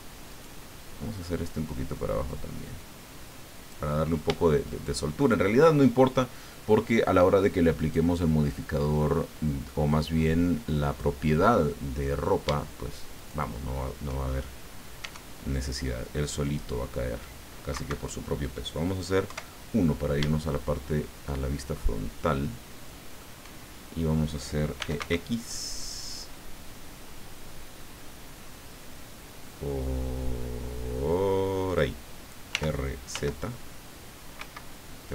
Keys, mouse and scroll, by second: 0.3 right click, 1.4-3.9 drag, 4.6 shift+right click, 7.8 right click, 8.5-11.2 drag, 13.1 shift+right click, 14.9 e, 17.7 Escape, 19.3 KP_1, 20.5-23.3 shift+drag, 24.8 e, 25.0 x, 31.6 click, 32.5 r, 34.4 Escape.